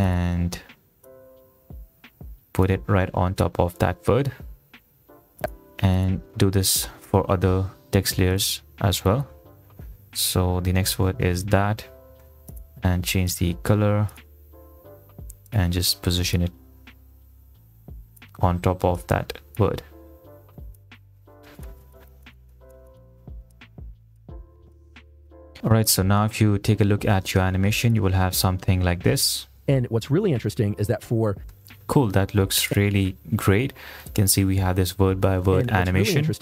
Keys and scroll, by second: 10.1-11.2 typing, 12.5 ctrl+a, 20.7 ctrl+z, 22.0 ctrl+a, 29.7 space, 31.7 space, 35.6 space.